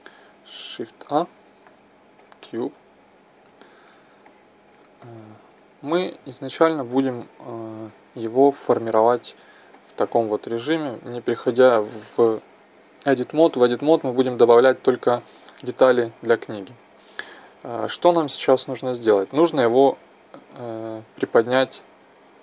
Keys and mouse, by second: 1.0 shift+a, 3.3-4.3 middle drag, 9.8-10.8 middle drag, 16.7 KP_1.